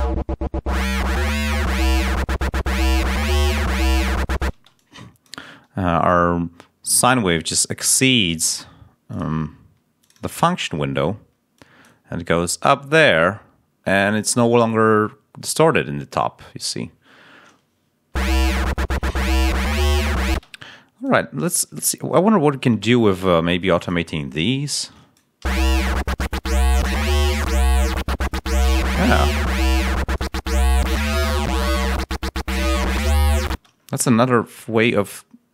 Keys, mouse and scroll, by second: 4.4 space, 5.0 click, 6.8 click, 9.0 click, 9.9 click, 11.4 click, 18.0 l, 20.2 space, 20.9 click, 25.4 l, 29.6 click, 30.0 click, 30.6-31.8 drag, 33.4 space.